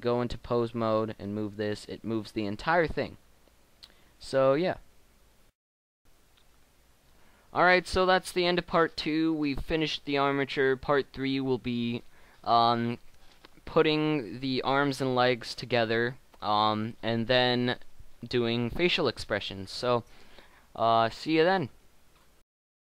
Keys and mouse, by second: 1.5 g.